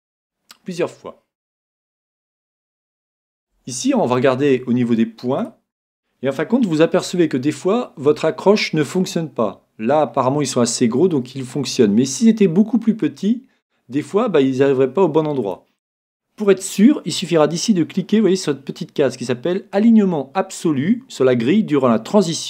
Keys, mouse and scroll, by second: 0.9-1.6 scroll up 1, 1.8-6.0 middle drag, 5.4 right click, 6.9 g, 15.6-17.4 drag.